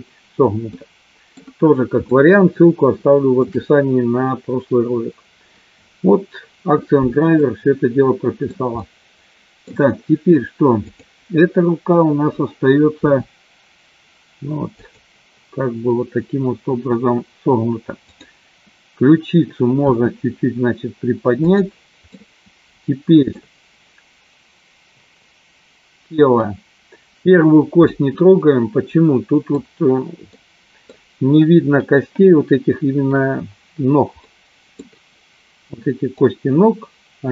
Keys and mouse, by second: 0.7 middle click, 2.2-3.5 shift+middle drag, 7.4-8.5 middle drag, 8.8-9.8 middle drag, 10.8 click, 13.0 r, 18.1 click, 20.0 r, 21.7 click, 22.1-23.4 middle drag, 28.0-29.5 middle drag, 30.4 middle click, 34.4 middle click, 36.1-37.3 middle drag.